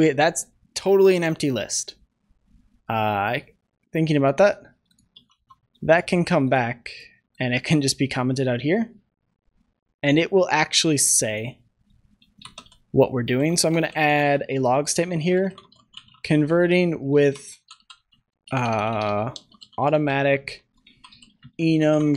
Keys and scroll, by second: 5.1 ctrl+z, 5.7 ctrl+s.